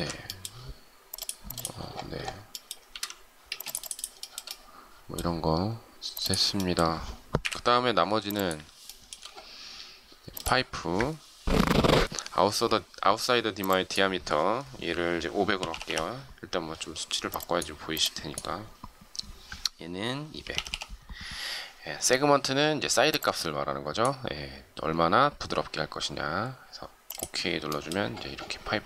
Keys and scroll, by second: 2.9 shift+z, 3.5 space, 7.1 Delete.